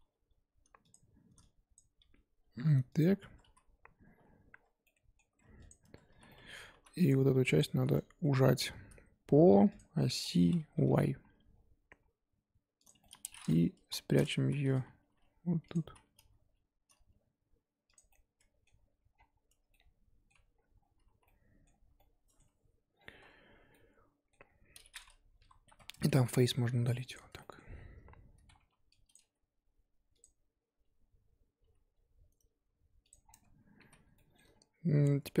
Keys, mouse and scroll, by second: 0.0 g, 1.7 click, 2.0 g, 3.2 Tab, 3.5 z, 4.2 scroll down 1, 4.5 Tab, 4.8 middle click, 5.4 Tab, 5.7 click, 5.8 Tab, 5.9 scroll up 1, 6.1 z, 6.3 middle click, 6.7 3, 7.1 click, 7.6 click, 7.8 z, 7.9-9.7 middle drag, 9.7 click, 10.2 scroll down 3, 10.4 scroll up 3, 10.7 s, 13.0 middle click, 13.8-16.3 typing, 18.1-19.1 middle drag, 19.1 scroll down 5, 19.5 Tab, 19.7 middle click, 20.3 Tab, 20.5-21.2 scroll up 6, 21.2 z, 21.2 middle click, 21.8 z, 21.9 scroll up 1, 22.0 middle click, 22.9 scroll down 1, 23.2 Tab, 23.7 middle click, 24.4-25.4 scroll up 4, 25.4 KP_1, 25.6 scroll up 3, 25.9 Tab, 26.2 z, 27.1 x, 27.4-28.6 shift+middle drag, 28.6 1, 29.1 click, 29.2 g, 31.6 g, 33.2 scroll down 4, 33.3 Tab, 33.8 z, 34.1 shift+middle click, 35.0-35.4 scroll up 4.